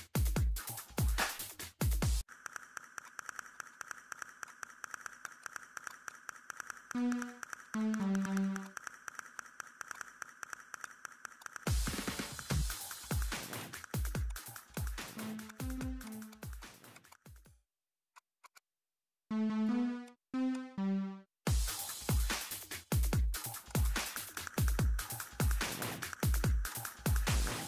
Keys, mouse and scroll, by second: 0.7 click, 1.5 middle click, 1.7 scroll up 1, 2.5 middle click, 3.0 click, 3.7 ctrl+click, 5.0 scroll down 1, 5.2 click, 5.9 click, 6.0-8.4 typing, 6.5 click, 6.8 middle click, 7.6 click, 8.0 click, 8.7 middle click, 9.3 click, 10.1 middle click, 10.8 click, 11.0 middle click, 11.4 click, 11.9 middle click, 12.8 scroll up 1, 13.0 click, 13.2 middle click, 13.5 click, 13.7 middle click, 14.2-15.4 typing, 14.2 click, 14.7 click, 14.8 middle click, 15.2 click, 15.5 click, 16.5 3, 16.6 click, 17.2 middle click, 18.1 click, 19.0 middle click, 19.3 8, 19.6 click, 22.2-23.1 typing, 23.7 click, 23.9 middle click, 24.3 click, 26.7 middle click, 27.1 click.